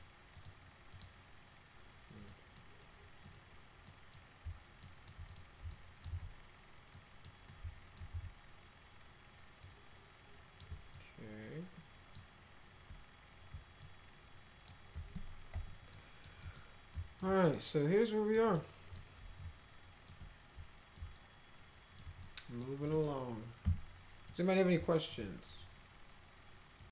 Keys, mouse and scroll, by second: 0.3 click, 0.9 click, 2.2 click, 2.5 middle click, 3.2 middle click, 3.8 middle click, 4.8 alt+right click, 5.3 click, 5.7 alt+right click, 6.1 z, 6.9 right click, 7.2 middle click, 7.5 alt+middle click, 8.1 z, 9.6 click, 10.9-12.1 ctrl+drag, 13.8 ctrl+click, 15.5 alt+q, 15.9 alt+middle click, 16.4 middle click, 16.9 alt+middle click, 17.4 click, 18.3 middle click, 18.9-20.1 middle drag, 20.9-21.9 alt+middle drag, 22.2 middle click, 22.8 middle click, 23.6 p, 24.2 middle click, 24.8 alt+middle click, 26.8 click.